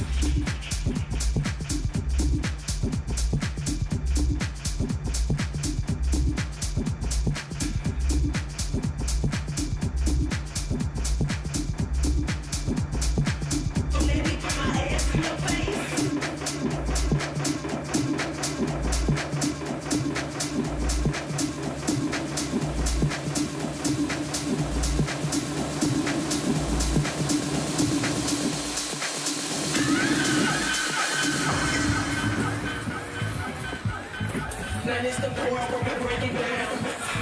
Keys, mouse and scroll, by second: 4.2 a, 4.6 middle click, 9.6 Tab, 11.4 shift+h, 12.7 Tab, 13.1-14.3 middle drag, 14.3 right click, 14.8 middle click, 16.3 middle click, 18.1 a, 18.5 a, 18.8 a, 21.3 k, 27.7 a, 28.6 k, 35.8 a.